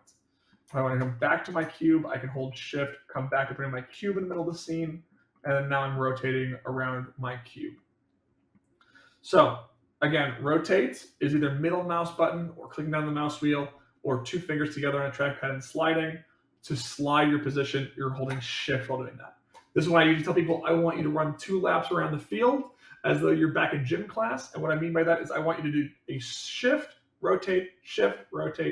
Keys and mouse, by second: 1.1 middle click, 2.3-4.1 shift+middle drag, 4.4-5.1 middle drag, 5.3-5.9 middle drag, 6.2-8.5 middle drag, 10.2-11.4 middle drag.